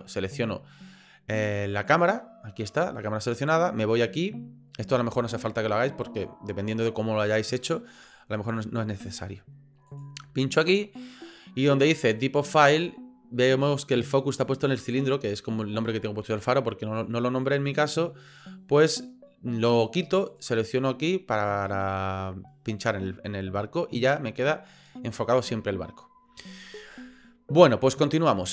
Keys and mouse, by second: 9.9 click, 17.4 click, 20.4 click.